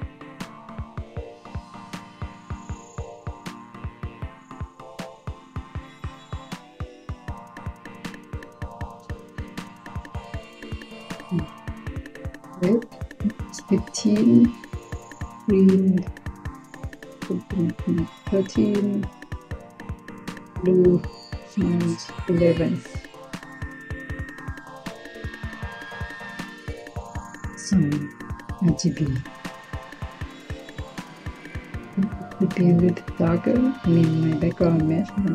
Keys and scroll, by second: 17.2-18.4 typing, 21.0-21.8 typing, 23.0 Return.